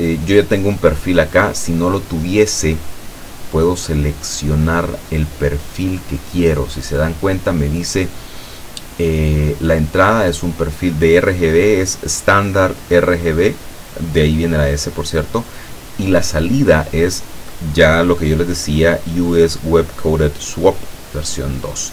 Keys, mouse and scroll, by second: 4.2-7.8 drag, 21.5 click.